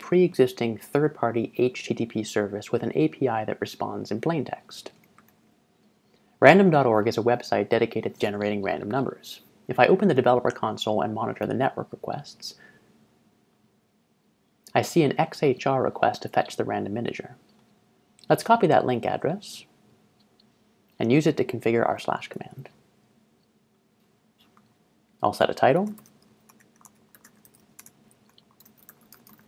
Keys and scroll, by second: 5.3 ctrl+Tab, 22.4 ctrl+shift+Tab, 25.5-29.4 typing.